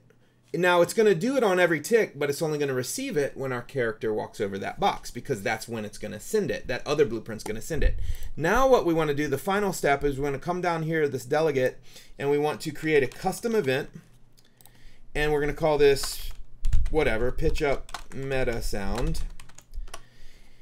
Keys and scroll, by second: 12.7-14.1 typing, 15.9-20.0 typing.